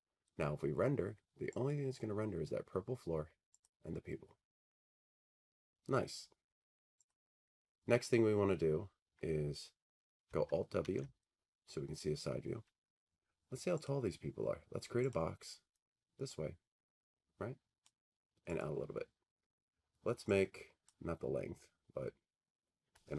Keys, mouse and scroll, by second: 1.7 click, 3.8 click, 7.1 click, 8.7 middle click, 8.7 click, 9.3 scroll, 10.8 alt+w, 14.2 click, 15.2 click, 17.9 click, 18.8 click, 21.0 click.